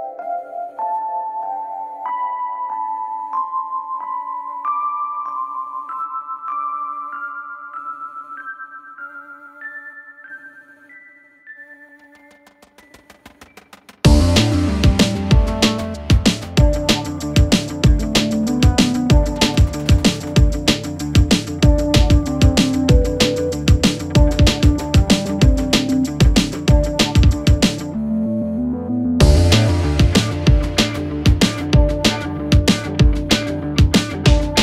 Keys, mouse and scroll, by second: 3.7 alt+Up, 5.6 click, 6.1 alt+scroll down 1, 7.2 space, 7.3 click, 7.5 space, 8.6 click, 10.2 shift+click, 11.8 alt+scroll up 1, 12.3-14.0 drag, 14.4 alt+scroll down 1, 16.0 alt+scroll up 1, 16.3 space, 16.4-17.1 click, 16.7 space, 17.5-19.8 drag, 19.8-20.2 alt+scroll down 1, 20.3 alt+scroll up 1, 20.5 space, 20.7-21.0 click, 20.9 space, 21.1 alt+scroll up 1, 22.3 click, 23.0 alt+scroll up 1, 23.2 space, 23.5 click, 23.5 space, 24.6-24.9 alt+scroll down 1, 26.1 click, 26.5 alt+scroll up 1, 26.7-29.0 drag, 33.8 click.